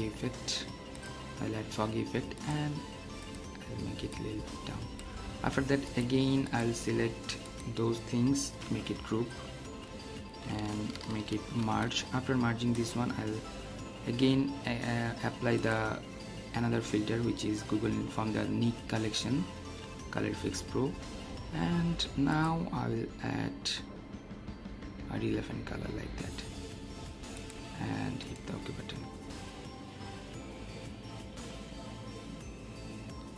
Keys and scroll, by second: 8.6 ctrl+g, 11.4 ctrl+alt+shift+e.